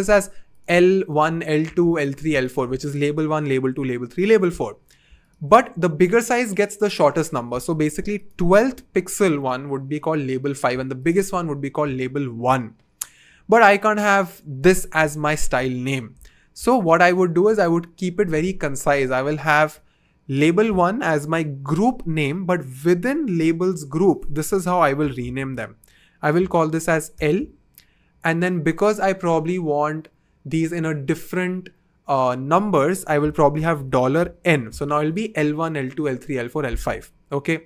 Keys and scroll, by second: 25.2 super+r, 27.1 shift+l, 33.7 shift+4, 34.4 n.